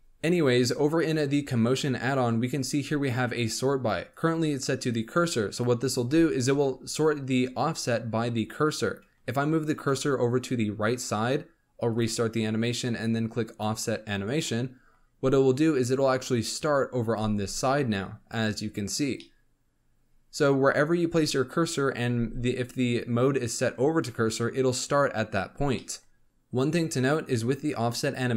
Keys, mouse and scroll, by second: 4.0-6.5 drag, 6.5 KP_7, 9.5 shift+right click, 11.9-14.4 drag, 14.4-17.1 middle drag, 17.1 space, 19.2-22.1 middle drag, 22.1 space, 25.7-26.2 middle drag.